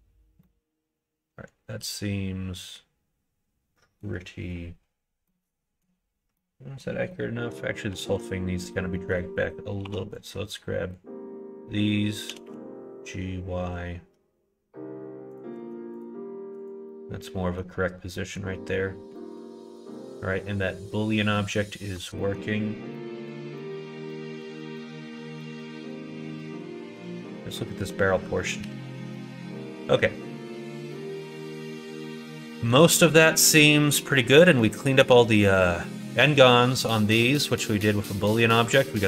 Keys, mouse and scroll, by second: 0.4-4.0 middle drag, 5.2 middle click, 6.3 middle click, 7.1 middle click, 8.0 alt+z, 9.0 middle click, 9.8 4, 10.2 click, 12.2 g, 15.5 alt+z, 15.9 click, 16.5 click, 16.9 middle click, 18.1 middle click, 19.1 middle click, 19.3 Tab, 19.6 click, 19.9 middle click, 21.3 middle click, 21.8 middle click, 22.1 middle click, 22.9 middle click, 23.5 shift+middle click, 24.1 middle click, 24.7 shift+middle click, 25.5 shift+middle click, 26.3 middle click, 26.9 click, 27.7 middle click, 28.6 /, 29.1-31.8 middle drag, 32.4 middle click, 33.4 middle click, 34.4 middle click, 35.8 middle click, 36.9 middle click, 37.9 middle click.